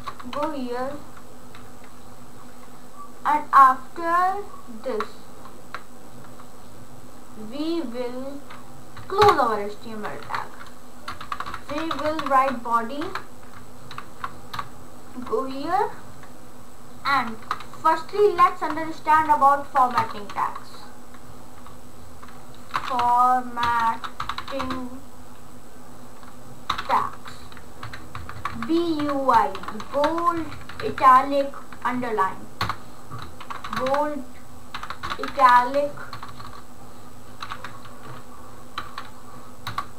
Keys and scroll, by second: 0.0 BackSpace, 0.4 shift+,, 9.2 Return, 10.3 Up, 11.0-13.9 typing, 14.6 Return, 17.2 shift+,, 17.7 b, 19.2 Right, 19.6 Up, 20.0 Return, 20.3 ctrl+/, 22.4-25.1 typing, 26.5-27.5 typing, 27.9 Down, 28.2 Left, 29.3-30.7 typing, 32.7 Return, 33.5-38.1 typing, 38.8 End, 39.7 Return.